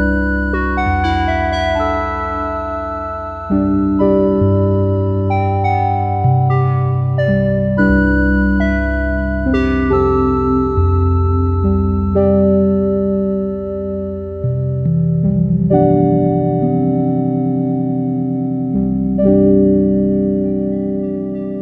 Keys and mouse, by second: 20.5-21.5 drag, 20.5-21.6 typing, 21.3 right click.